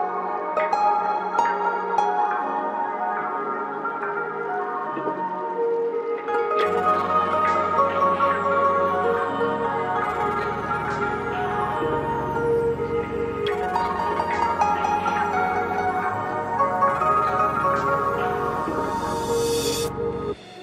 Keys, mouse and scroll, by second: 0.0 click, 4.4 scroll down 1, 4.7 click, 7.4 right click, 9.2 click, 16.1-20.6 drag.